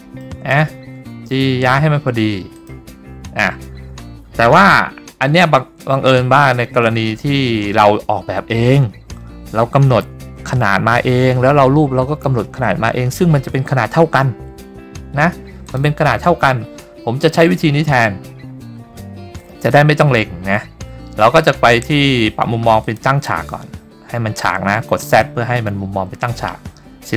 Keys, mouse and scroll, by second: 1.4 g, 2.7 click, 4.5 scroll down 2, 15.3 s, 15.8 click, 22.9 click.